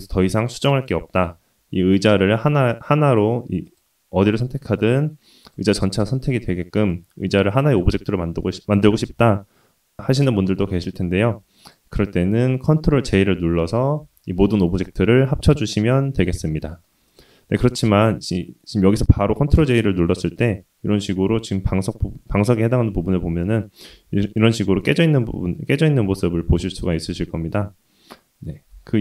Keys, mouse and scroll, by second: 1.6 click, 2.6 click, 3.2 click, 3.7 click, 5.1 click, 5.9-6.8 drag, 11.6 click, 12.0 click, 13.8 ctrl+j, 14.6-15.5 scroll up 2, 15.5-16.8 middle drag, 15.5-16.1 scroll up 1, 17.0 click, 17.5-18.4 middle drag, 19.3-19.9 middle drag, 20.3 click, 21.0-21.6 middle drag, 23.1 ctrl+j, 23.1-24.4 middle drag, 23.1 scroll up 3, 24.6 click, 25.0-25.9 middle drag, 26.8-27.4 middle drag, 27.6 Tab, 27.9 Tab, 28.7 ctrl+z.